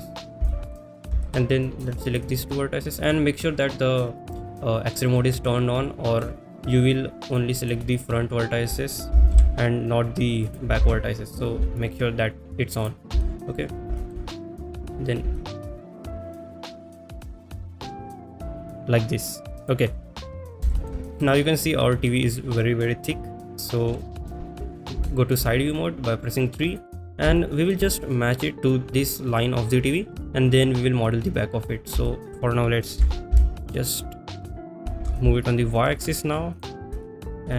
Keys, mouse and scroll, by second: 0.5 shift+middle click, 1.4 shift+middle click, 1.9 click, 6.3 middle click, 7.3 click, 7.6 middle drag, 10.8 g, 10.8 y, 11.6 ctrl+z, 11.6 KP_1, 12.9 click, 13.3 shift+middle click, 14.1 shift+middle click, 14.8 click, 15.4 shift+middle click, 15.7 shift+middle click, 16.0 g, 16.0 x, 17.3 click, 17.5 shift+middle click, 17.7 click, 17.9 shift+middle click, 18.4 g, 18.4 x, 19.7 click, 20.3 middle click, 20.8 shift+middle click, 21.3 middle click, 23.9 KP_3, 25.1 shift+middle click, 26.2 click, 27.4 shift+middle click, 32.1 shift+middle click, 33.8 g, 33.8 x, 35.4 y, 37.1 shift+middle click.